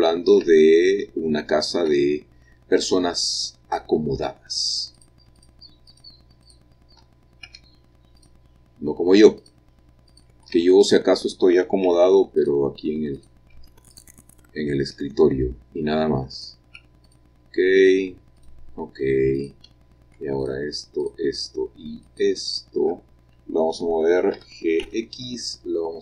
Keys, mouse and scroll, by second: 0.2-4.0 shift+middle drag, 1.6-4.0 scroll up 3, 5.0 click, 5.5 shift+click, 6.0 shift+click, 6.5 shift+click, 7.6 x, 8.3 click, 9.5 click, 10.2 click, 10.6 Tab, 10.9 click, 12.0 x, 12.5 click, 13.3 click, 13.6 x, 14.0 click, 14.3 click, 15.1 middle click, 16.4 click, 16.9 x, 17.2 click, 17.9 click, 18.2 x, 18.5 click, 19.5 click, 20.5 shift+click, 21.1 shift+click, 22.2 shift+click, 24.4 g, 24.9 x.